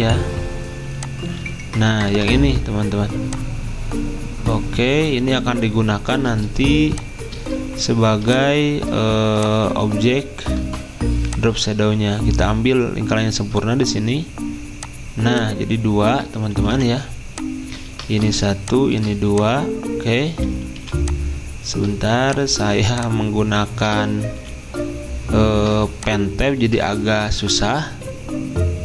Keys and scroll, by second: 2.1 v, 16.7 Escape, 17.9 ctrl+z, 20.8 Escape, 24.4 Escape.